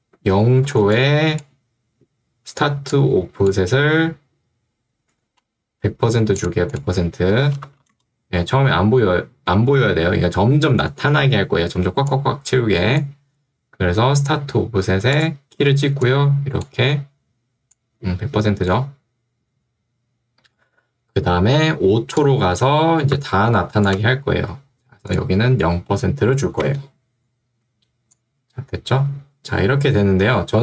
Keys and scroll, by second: 0.8 ctrl+2, 5.2 Escape, 7.2-8.2 typing, 11.9 ctrl+2, 13.5 Escape, 15.9 ctrl+2, 19.7 Escape, 26.5 0, 26.7 Return.